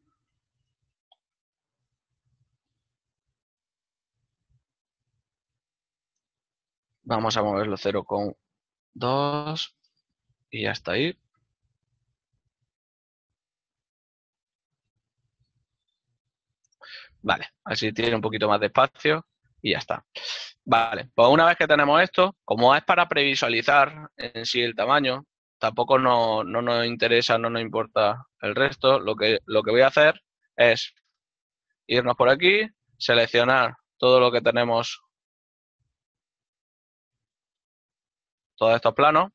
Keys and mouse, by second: 1.3 KP_9, 2.9 g, 7.6 KP_0, 9.7 Return, 9.7 KP_Enter, 20.6 ctrl+middle click, 26.2 right click, 30.0 z, 32.1 click, 33.7 b, 34.5 click, 35.8 middle click, 37.2 click, 39.0 right click.